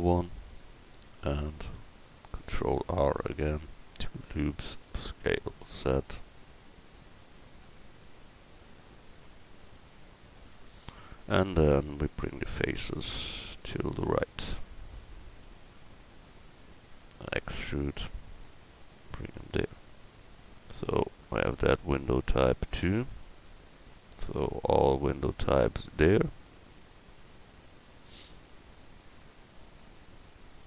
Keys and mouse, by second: 2.4 ctrl+r, 4.7 s, 13.1-14.9 drag, 14.9-16.3 right drag, 16.3 middle click, 17.6 e, 19.8 Tab, 21.0 a.